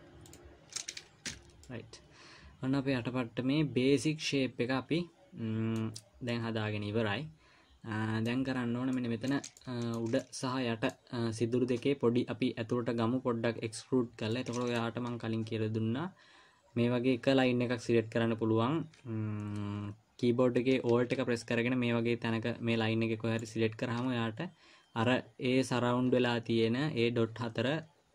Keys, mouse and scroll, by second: 0.0 click, 1.7 f, 2.0 middle click, 6.7 middle click, 8.9-9.4 scroll up 2, 9.4 middle click, 9.9 shift+middle click, 10.6 middle click, 14.7-15.1 scroll up 1, 23.8 alt+click.